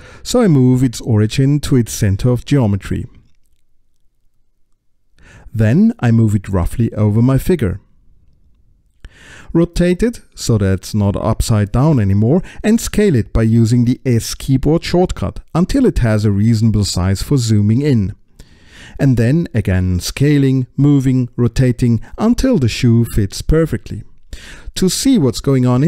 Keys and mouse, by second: 3.7-4.7 middle drag, 5.5 middle click, 7.4-8.8 middle drag, 10.4 middle click, 12.0-13.0 middle drag, 13.0 click, 15.6 s, 18.8 click, 19.1 KP_Decimal, 19.9 s, 20.7 click, 21.7 space, 22.0 click, 22.5 middle click, 23.0 middle click, 23.9 space, 24.3 click, 24.9 middle click, 25.3 middle click.